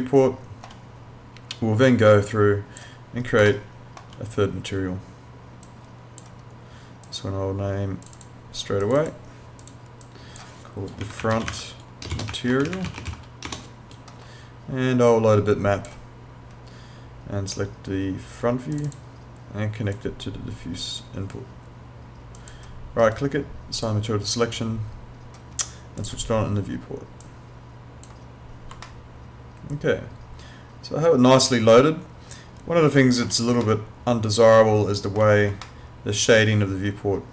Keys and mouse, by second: 1.8 click, 3.6 alt+middle click, 5.6 click, 11.0-13.1 typing, 15.1 click, 18.8 click, 23.0 right click, 23.8 click, 28.8 alt+middle click, 33.6 alt+middle click.